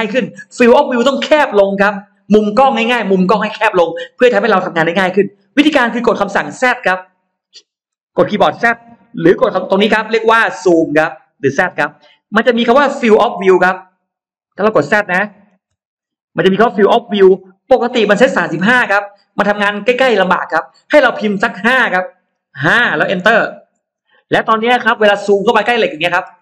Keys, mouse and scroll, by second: 7.7 z, 8.4 z, 8.6 z, 13.0 z, 14.3 middle click, 14.7 scroll down 1, 14.9 middle click, 22.5 5, 23.6 Return, 24.6 scroll down 2, 25.7-26.4 scroll up 3, 26.1 space.